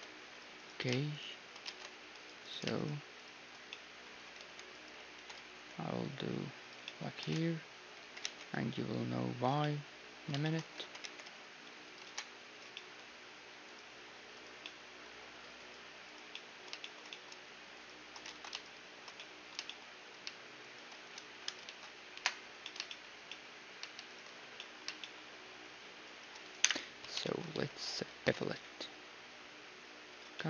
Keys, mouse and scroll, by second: 0.5-4.4 right drag, 1.7 ctrl+Tab, 3.7-5.6 middle drag, 4.4 click, 4.4 g, 5.2 e, 6.8-8.6 middle drag, 7.2 ctrl+Tab, 8.0 g, 9.6-12.6 middle drag, 11.0 g, 12.0 ctrl+Tab, 12.7 middle click, 13.7-15.3 drag, 15.3-21.5 middle drag, 18.3 ctrl+z, 21.4-22.6 right drag, 21.7 ctrl+z, 22.1 KP_Decimal, 22.6-24.0 middle drag, 24.0-25.8 drag, 24.0-25.3 right drag, 25.3-26.9 middle drag, 26.6 click, 26.6 KP_1, 26.9 right click, 26.9 z, 27.2 click, 27.2-29.8 middle drag, 27.5 z, 28.0 ctrl+b, 30.3-30.4 middle drag.